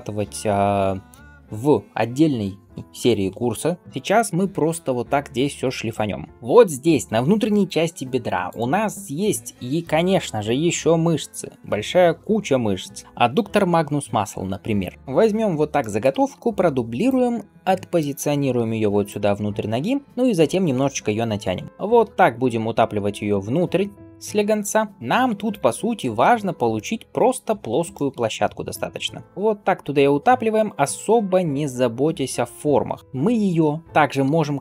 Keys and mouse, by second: 8.3 click, 8.3 middle click, 16.2 shift+d, 18.4 g, 20.0 Tab, 20.7 g, 22.3 click, 23.4 g, 24.1-30.6 middle drag, 24.8 click, 24.8 right click, 28.6 click, 28.6 right click, 29.0 g, 29.2 g, 30.6-34.6 right drag, 33.0 Tab, 34.1 q.